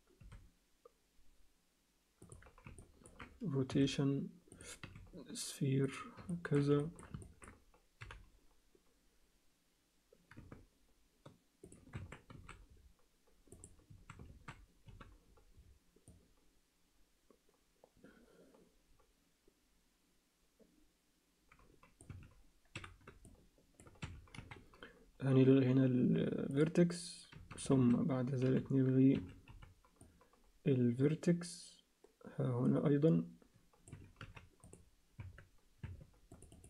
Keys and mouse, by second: 0.2 r, 2.8 ctrl+alt+click, 3.7 r, 4.8 s, 6.3 ctrl+alt+click, 6.8 alt+shift+click, 7.2 middle click, 8.2 g, 11.9 Tab, 12.3 a, 13.5 click, 13.9 a, 14.9 c, 22.7 c, 24.4 x, 27.3 a, 28.4 v, 29.1 Escape, 29.5 c, 34.2 x, 35.2 Tab, 35.8 Tab, 36.5 click.